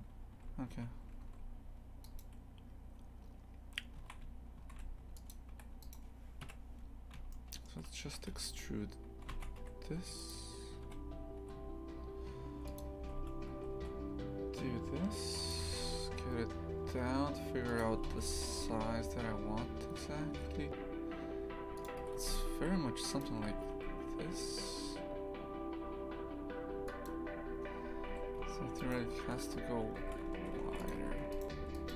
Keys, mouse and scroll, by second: 0.3 2, 2.0-4.0 right drag, 4.0 shift+f, 5.5 3, 5.8 right click, 6.4 KP_3, 7.3 shift+middle click, 8.0 e, 10.3 click, 10.8 g, 28.0 2, 28.3 a, 28.8-30.0 alt+shift+right drag, 30.0 shift+f, 31.3 shift+right click, 31.7 shift+right click.